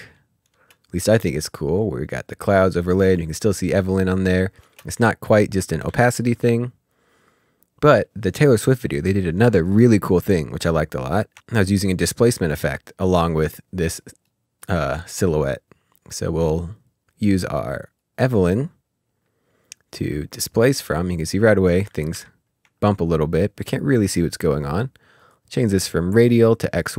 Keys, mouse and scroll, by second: 0.5 space, 4.6 space, 5.5 click, 5.8 s, 6.2 click, 10.5 click, 11.4 ctrl+space, 12.3-13.5 typing, 14.2 Return, 17.9 middle click, 18.1 click, 22.7-23.7 scroll up 3, 25.1 click.